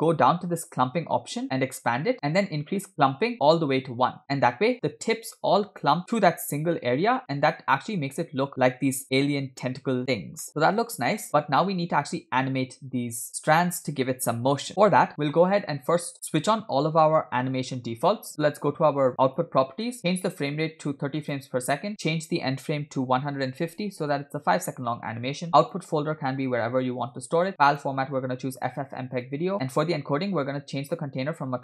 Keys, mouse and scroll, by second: 0.5 scroll down 4, 1.7 click, 2.1-2.5 scroll down 1, 2.6-4.7 drag, 7.5-10.0 middle drag, 10.5 middle click, 11.2-11.5 scroll down 2, 11.4-12.3 scroll up 2, 12.3 scroll up 1, 16.1-17.4 middle drag, 19.3 click, 20.0-20.4 scroll up 3, 20.5-21.5 drag, 21.9-24.3 drag, 25.3-25.7 scroll down 2, 25.7-27.2 drag, 27.1 /, 27.8-28.1 drag, 29.4 click, 29.5 scroll down 2, 29.8 click, 30.2-30.7 scroll down 2.